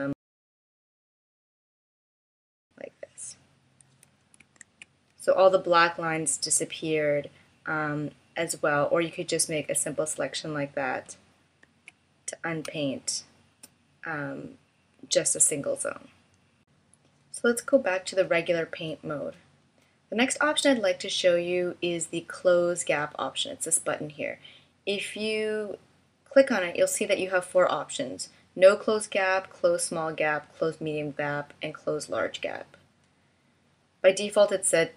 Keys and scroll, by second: 0.2 space, 4.6 super+z, 11.6 super+z, 12.7 space.